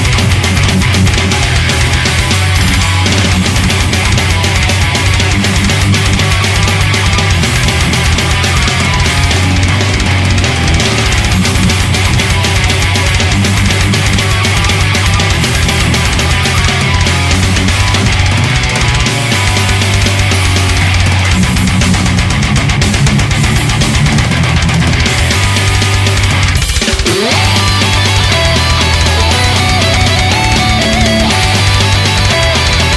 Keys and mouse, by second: 12.0 ctrl+z, 12.4 ctrl+z, 13.9 ctrl+z, 14.9 ctrl+z, 27.1 ctrl+z, 29.1 ctrl+z.